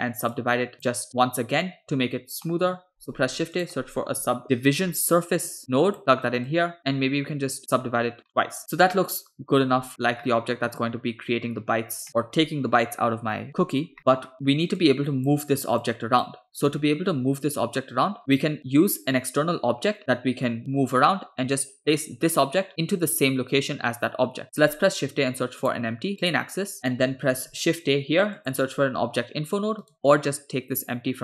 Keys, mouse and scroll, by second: 0.4 click, 2.5 shift+middle click, 3.0 shift+a, 6.5 click, 7.7 click, 8.3-9.8 middle drag, 10.3 middle click, 12.1 middle click, 13.5-13.9 scroll down 2, 14.0 middle click, 14.3-14.8 scroll down 2, 14.8-15.4 drag, 15.9 click, 16.8 middle click, 17.8 middle click, 18.2 scroll up 2, 21.8 click, 24.4 shift+a, 26.8 middle click, 27.3 shift+a.